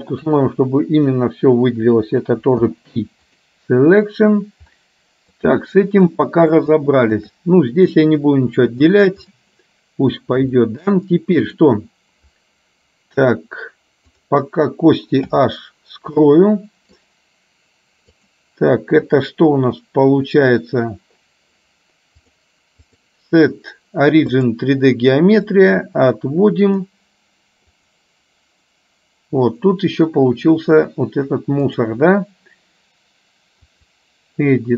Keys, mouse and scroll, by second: 2.6 p, 5.0 middle click, 6.3 middle click, 6.8 shift+middle click, 9.0 click, 10.7 shift+middle click, 11.7 click, 15.3 h, 16.3 middle click, 18.2 click, 22.2-24.6 drag, 25.6-27.0 drag, 27.8 click, 31.7-34.3 drag.